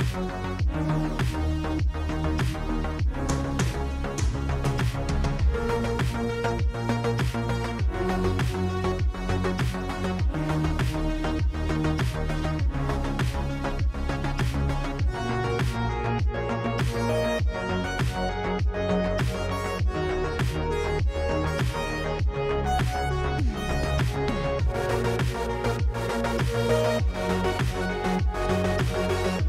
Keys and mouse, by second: 4.2 middle drag, 4.8 middle drag, 5.1 shift+d, 5.6 click, 6.2 shift+middle click, 6.7 click, 7.4 click, 8.1 click, 8.9 click, 9.2 click, 10.2-11.4 drag, 10.8 0, 12.8-13.9 drag, 20.3 click, 21.4-23.0 drag, 24.1 drag, 24.6 h, 25.1 ctrl+z, 25.5-26.2 drag, 26.2 ctrl+z, 26.5 middle drag, 27.2 drag, 27.8 click, 28.5 click, 29.3 click.